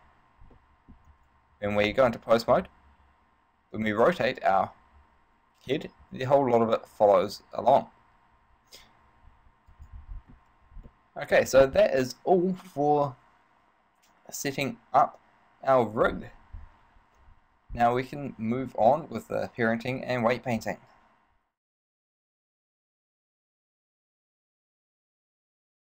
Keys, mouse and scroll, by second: 0.1 ctrl+Tab, 0.7 middle click, 1.4 Tab, 2.1 right click, 2.9 r, 10.1 right click, 10.3 scroll down 4, 11.1 middle click.